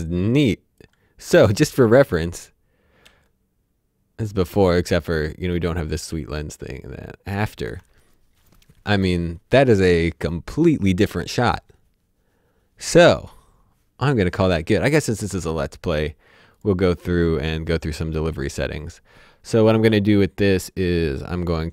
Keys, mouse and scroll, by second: 3.0 alt+d, 6.1 alt+d, 14.1 ctrl+Num_Lock, 14.4 ctrl+s, 16.5 click.